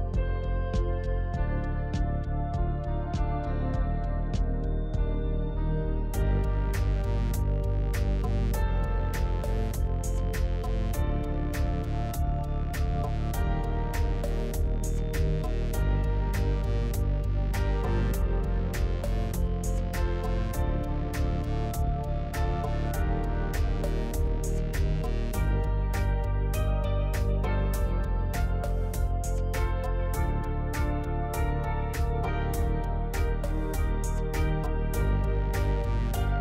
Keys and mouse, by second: 0.6 click, 4.4 Tab, 4.8-6.1 drag, 6.6 KP_3, 7.7 shift+click, 8.7 alt+z, 9.4 Tab, 10.8 shift+click, 11.7 ctrl+r, 16.2-17.3 drag, 22.2 click, 22.9 g, 25.8 click, 26.0 g, 27.8 g, 29.0 click, 29.3 g, 30.6 g, 32.5 g, 34.5 alt+click, 35.5 alt+z, 35.8 middle click.